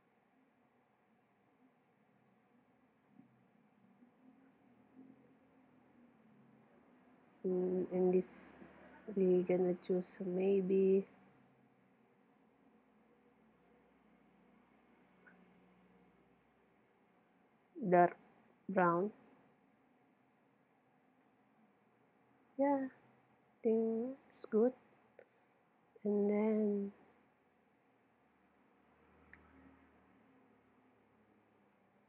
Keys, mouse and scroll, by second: 0.7-2.5 drag, 4.6-7.3 drag, 7.7-11.7 drag, 17.1-18.8 drag, 23.2-25.1 drag, 25.7-28.6 drag.